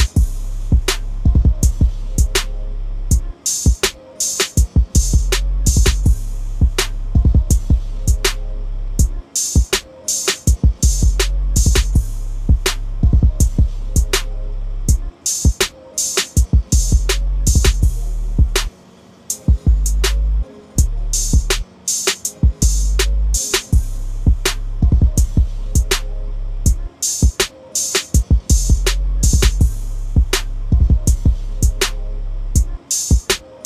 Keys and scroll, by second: 31.2-31.7 typing.